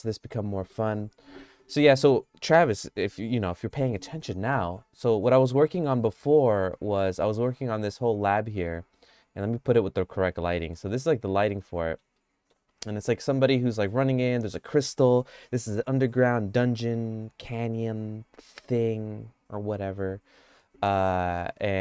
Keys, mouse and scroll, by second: 4.1 middle click, 6.8 middle click, 7.1 middle click, 7.6 shift+middle click, 8.4 middle click, 9.7 click, 10.4 middle click, 11.0-12.0 shift+middle drag, 12.2 middle click.